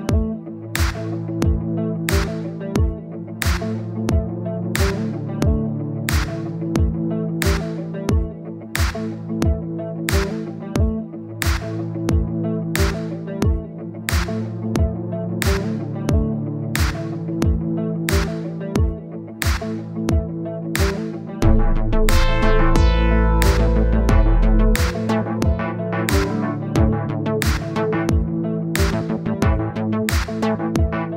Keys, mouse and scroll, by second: 2.1-3.3 drag, 3.6-7.4 drag, 7.4 scroll down 2, 7.6 click, 8.3-8.9 scroll up 1, 8.9-10.5 drag, 10.8 click, 11.1 click, 11.6 click, 11.8 click, 12.2-13.4 drag, 15.6-16.7 drag, 20.7 scroll up 2, 20.9 scroll down 1, 21.7 click, 22.2-22.8 scroll up 1, 22.8-31.1 drag.